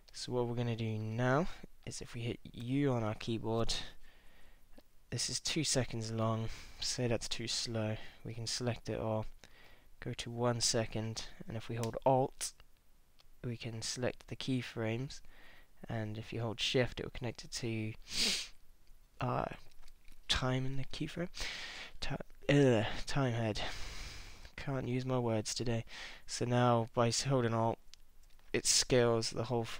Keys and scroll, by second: 2.6 u.